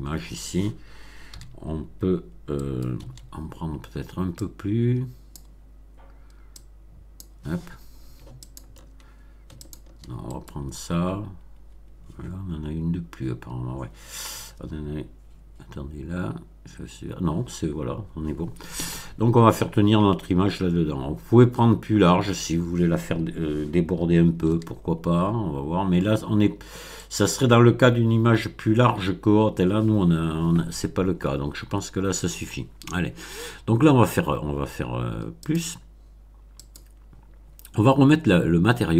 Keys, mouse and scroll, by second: 1.2 b, 2.5 right click, 3.0 c, 4.3-5.5 drag, 6.5 click, 8.4 ctrl+click, 9.5 shift+click, 10.3 shift+middle click, 24.4 b, 27.0 right click, 35.3 click, 36.6 click.